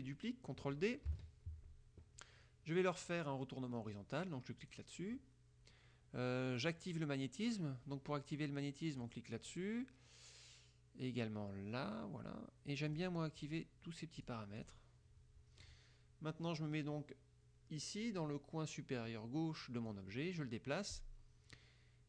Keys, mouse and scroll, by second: 1.2 ctrl+d, 4.7 click, 6.7 click, 9.1 click, 13.0 click, 13.5 click, 14.3 click, 14.7 click, 20.0-22.0 drag.